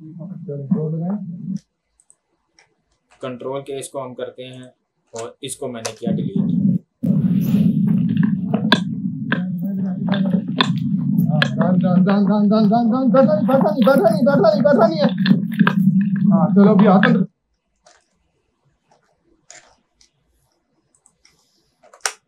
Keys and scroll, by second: 1.5 space, 3.3 ctrl+k, 5.2 Delete, 17.1 space, 18.0 ctrl+z, 21.9 ctrl+k.